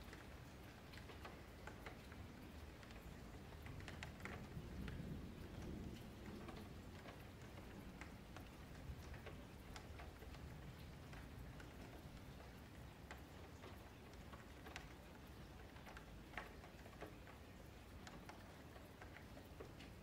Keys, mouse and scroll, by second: 2.4 scroll up 3, 2.6-2.9 shift+middle drag, 2.9 scroll down 1, 3.1-3.7 middle drag, 3.7 scroll down 1, 3.9 click, 4.2 Tab, 4.4 1, 4.6 click, 5.5 click, 6.8-8.0 middle drag, 8.0 shift+Tab, 8.6 g, 9.5 click, 9.7 g, 10.3 shift+middle click, 10.6 click, 10.8 g, 11.6 shift+middle click, 11.9 click, 12.1 g, 13.1 middle click, 13.8 click, 14.0 g, 15.6 click, 15.8 g, 16.5 click, 16.7 g, 17.4 click, 17.6 g, 18.1 shift+middle click, 19.0 click, 19.2 g, 19.8 click.